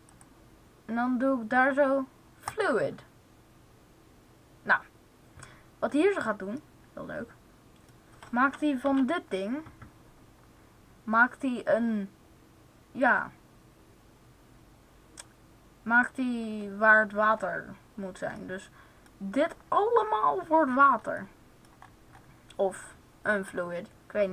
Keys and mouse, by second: 5.8-7.2 middle drag, 8.7 z, 20.7 middle click.